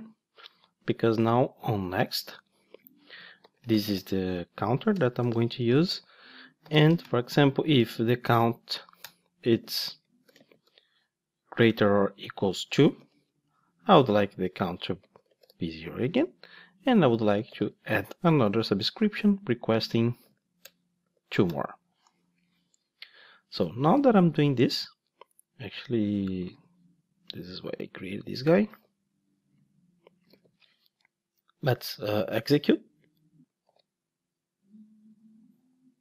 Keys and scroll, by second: 1.6 Tab, 4.3 Tab, 4.4 Return, 9.1 Return, 14.5 Return, 26.6 super+c, 28.7 super+v, 34.1 ctrl+shift+d.